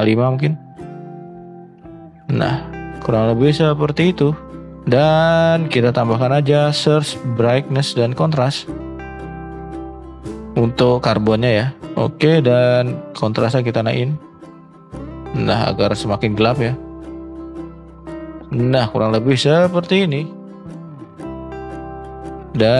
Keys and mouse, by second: 4.8 shift+middle drag, 5.6 middle drag, 6.0 shift+a.